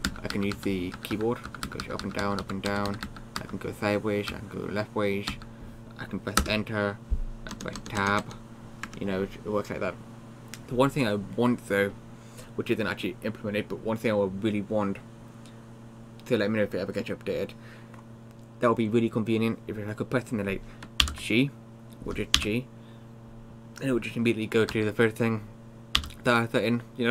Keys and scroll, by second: 0.1 Down, 0.3 Down, 0.6 Down, 1.0 Up, 1.2 Up, 1.5 Down, 1.7 Down, 1.8 Down, 2.0 Down, 2.2 Down, 2.4 Down, 2.7 Up, 2.9 Up, 3.1 Up, 3.4 Right, 4.3 Left, 5.3 Up, 6.4 Return, 7.6 Tab, 7.8 Tab, 8.2 Tab, 8.9 Tab, 21.1 shift+g, 22.4 g, 24.7 Up, 26.0 g.